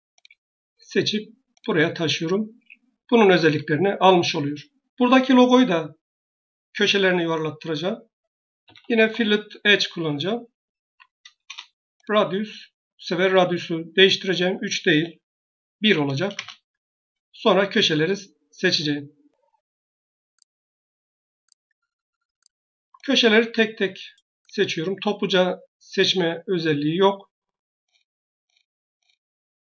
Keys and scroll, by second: 2.4 Escape, 8.5 f, 10.7 typing, 11.3 Return, 15.7 1, 16.2 Return.